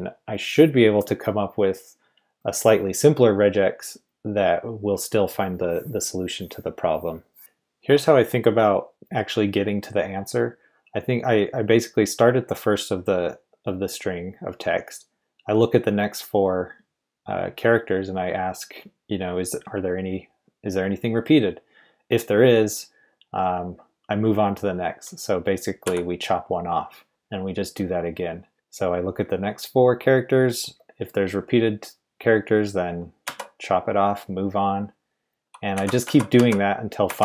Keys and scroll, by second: 7.1-7.9 typing, 25.8 x, 27.2 typing, 33.2 typing, 35.7-37.1 typing.